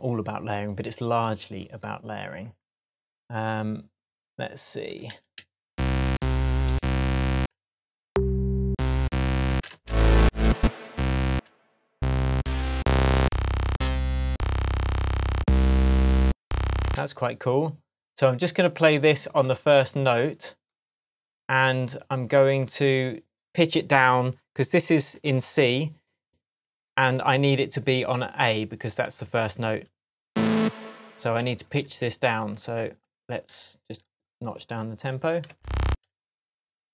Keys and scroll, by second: 8.6 Up, 16.8 space, 26.6 shift+Tab, 30.9 shift+Tab, 35.5 space.